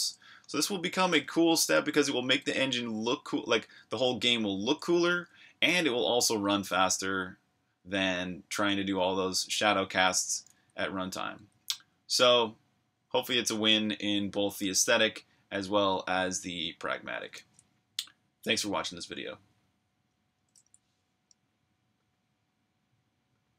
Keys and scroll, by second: 0.0-1.2 typing, 2.6-5.4 typing, 7.4-8.2 typing, 9.6-11.4 typing, 12.8-14.0 typing, 20.4 super+q.